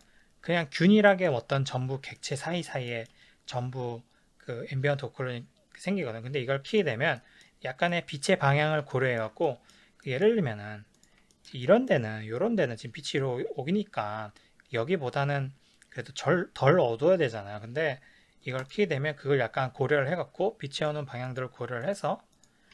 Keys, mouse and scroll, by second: 1.1-6.7 shift+middle drag, 6.7 click, 7.2-11.0 shift+middle drag, 11.0 click, 11.3-18.6 shift+middle drag, 18.6 click, 20.8 click, 21.3 click, 21.9 click, 22.4 click.